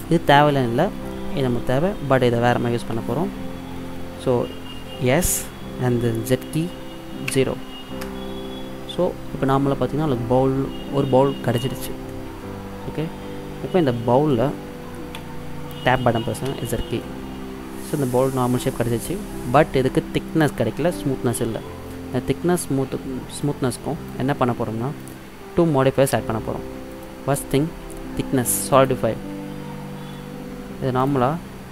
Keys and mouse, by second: 5.1 s, 12.2-14.0 middle drag, 15.2 Tab, 16.6 z, 17.1-18.9 middle drag, 23.6-26.9 drag, 27.0-28.7 drag, 31.1-31.7 drag.